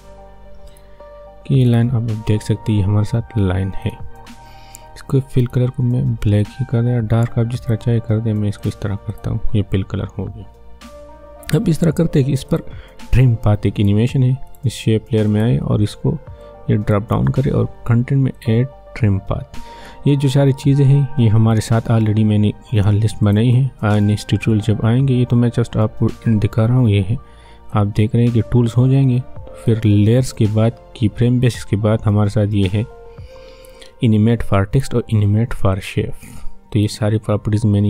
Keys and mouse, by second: 0.7-8.6 drag, 12.5 click, 22.2 click, 23.2 click, 27.7-35.7 drag, 35.7-37.8 drag.